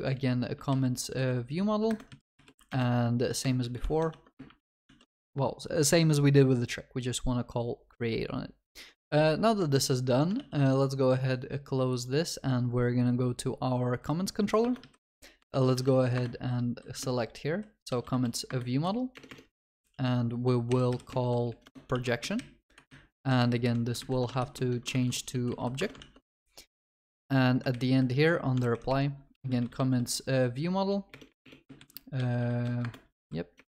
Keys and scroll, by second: 1.9 Return, 4.9 ctrl+s, 10.4 ctrl+s, 16.2 Return, 22.0 ctrl+s, 22.2 Escape, 24.9 Escape, 24.9 ctrl+w, 26.0 Return, 26.0 ctrl+s, 32.9 Return.